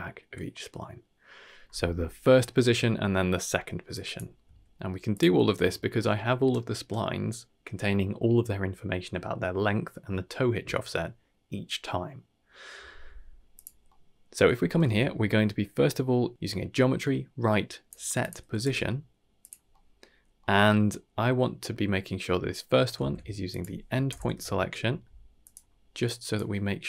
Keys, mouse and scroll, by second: 2.6-3.3 scroll down 2, 3.5 middle click, 3.5 scroll down 3, 3.9 click, 4.4 s, 5.4 scroll down 1, 5.6 shift+middle drag, 13.5 click, 13.8-14.2 middle drag, 14.5 middle click, 14.8 shift+a, 18.6 g, 19.7 middle click, 20.1-20.6 scroll up 2, 20.4 middle click, 21.6 scroll up 1, 21.9 middle click, 22.9 shift+a, 26.0 click.